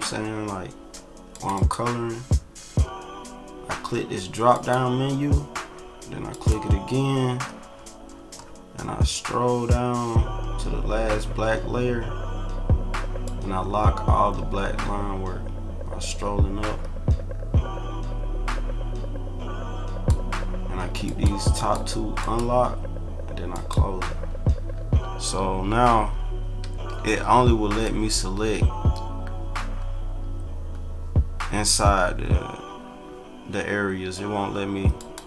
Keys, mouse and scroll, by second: 1.3 click, 4.5 click, 6.3 click, 7.1 scroll down 1, 8.1 middle click, 8.5 middle click, 8.9 middle click, 9.3 middle click, 9.9 middle click, 10.5 middle click, 11.3 scroll up 2, 13.2 click, 18.8-20.0 drag, 21.0 click, 21.5 click, 22.2 click, 23.5 click, 24.7 ctrl+-, 25.8-26.4 scroll down 4, 26.8 ctrl+=, 27.6 click, 28.4 click, 34.9 click.